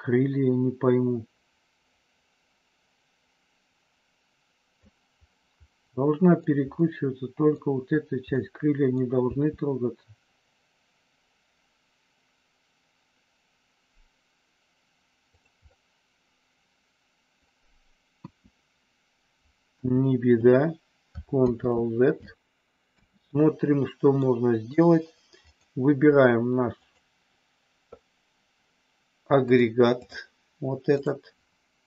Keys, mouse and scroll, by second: 5.7 middle click, 6.8 middle click, 8.4 middle click, 9.2 r, 15.3 click, 15.7-17.4 middle drag, 18.2 KP_1, 19.8 KP_3, 21.4 ctrl+z, 22.8 KP_1, 24.1 middle click, 25.4 click, 26.8 click, 29.4 click, 30.9 click.